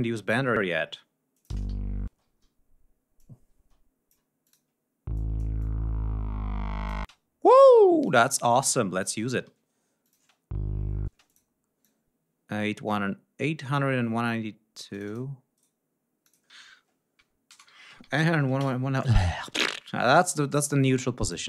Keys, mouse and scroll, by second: 0.5 scroll down 2, 1.3 click, 1.5 space, 1.7 ctrl+scroll up 2, 2.2 ctrl+d, 3.1 click, 3.5 space, 4.4 click, 5.1 click, 5.6-7.1 drag, 6.9 space, 8.0 click, 9.4 d, 10.0 click, 10.1 space, 11.0 space, 11.2 click, 11.8-15.3 drag, 15.5 right click, 16.2 click, 16.9-18.6 typing, 20.7 click.